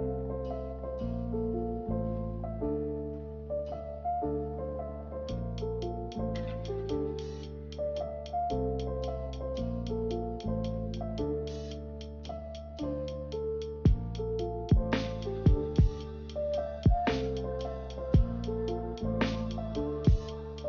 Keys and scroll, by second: 3.6 ctrl+c, 3.8 ctrl+v, 15.2 Delete.